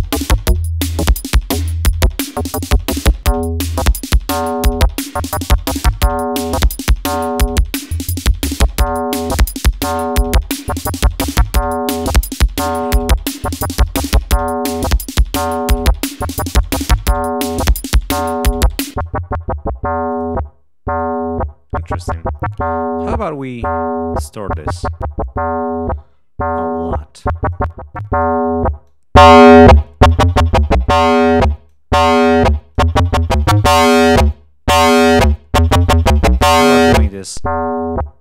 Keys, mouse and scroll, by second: 1.9 click, 3.0-5.6 drag, 7.0 click, 8.2 click, 11.1-12.4 drag, 17.8 click, 18.9 click, 20.1 click, 20.9 right click, 22.3-22.9 scroll down 2, 24.5 click, 26.7 click, 27.1 right click, 27.5 click, 28.8 click, 29.8-31.1 drag, 31.3 click, 32.4-34.2 drag, 34.0 right click, 34.3-35.3 drag, 35.5 click, 37.3 click.